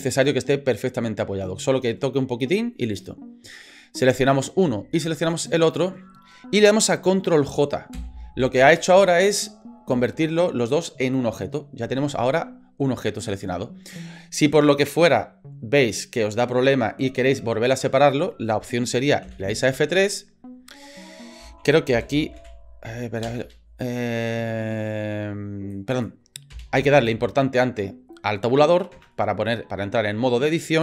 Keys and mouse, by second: 4.3 right click, 5.3 shift+right click, 7.9 ctrl+j, 19.3 F3, 23.4 BackSpace, 28.9 Tab.